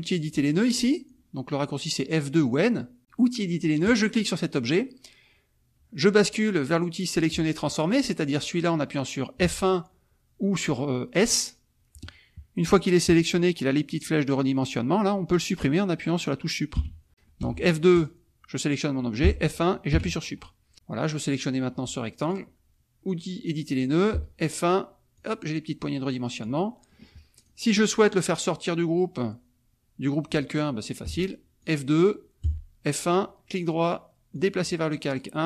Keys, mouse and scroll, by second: 3.8 click, 9.4 F1, 16.7 Delete, 17.4 F2, 17.9 click, 19.3 F1, 19.9 Delete, 21.7 F2, 22.2 click, 24.1 F1, 25.1-26.6 drag, 26.6 middle click, 27.3 click, 31.1 F2, 31.6 click, 32.4 F1, 33.0 right click, 34.4 click.